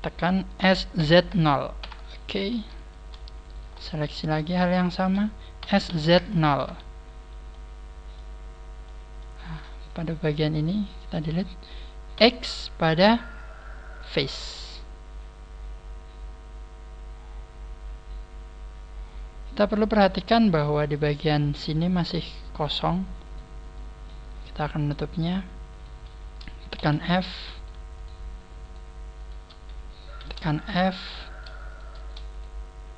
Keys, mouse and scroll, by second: 0.5 s, 3.3 alt+shift+right click, 3.3 a, 3.7 middle click, 4.7 alt+shift+right click, 5.5 s, 7.4 middle click, 8.4-8.8 scroll up 3, 8.7 middle click, 9.7 right click, 10.1 shift+right click, 10.6 shift+right click, 10.9 shift+right click, 12.1 x, 14.5 middle click, 21.1 shift+middle click, 22.5 right click, 23.1 right click, 23.7 middle click, 24.3-24.7 scroll up 3, 24.7 shift+right click, 25.1 shift+right click, 25.6 shift+right click, 26.7 f, 27.5 shift+right click, 27.9 shift+right click, 28.7 shift+right click, 29.1 shift+right click, 30.1 f, 30.5 shift+middle click, 31.2 right click, 32.2 shift+right click.